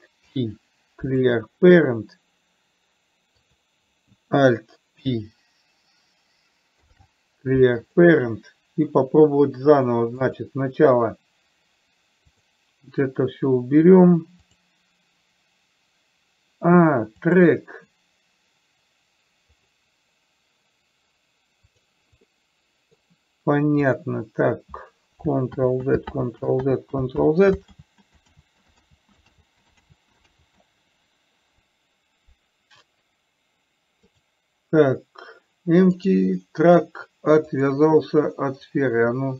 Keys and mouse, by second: 0.5 alt+p, 5.3 alt+o, 7.0 alt+p, 12.7 click, 14.8 click, 22.7 middle click, 24.3 click, 25.8 ctrl+click, 26.5 ctrl+z, 27.2 ctrl+z, 28.3 ctrl+z, 28.8 ctrl+z, 29.8 ctrl+z, 30.3 ctrl+z, 34.4 click, 36.4 click, 37.8 click.